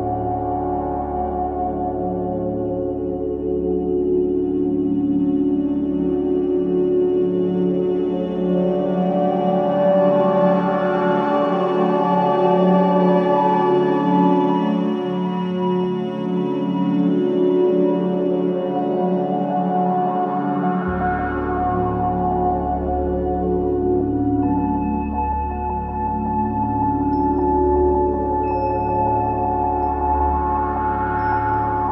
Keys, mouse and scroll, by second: 0.9-1.3 scroll up 1, 6.6-14.5 drag, 14.5-14.9 scroll down 1, 15.9-17.4 drag, 17.4-17.7 scroll down 1, 18.6-19.9 scroll up 1, 19.9-23.8 drag, 23.8 scroll down 1, 24.3-24.7 scroll up 1, 25.5-27.4 drag, 27.4-28.0 scroll down 1, 28.0 scroll up 1, 28.8-29.3 scroll down 1, 31.6-31.9 scroll up 1.